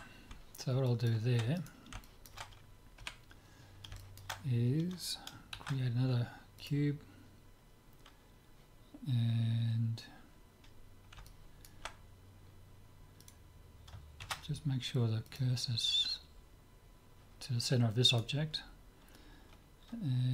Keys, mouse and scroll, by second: 0.9 middle click, 1.6-3.4 drag, 3.0 KP_7, 3.4-6.4 middle drag, 5.6 shift+a, 8.1-10.1 middle drag, 10.3-13.3 middle drag, 13.3-15.2 drag, 14.2 shift+s, 18.1-19.7 drag, 19.7 right click.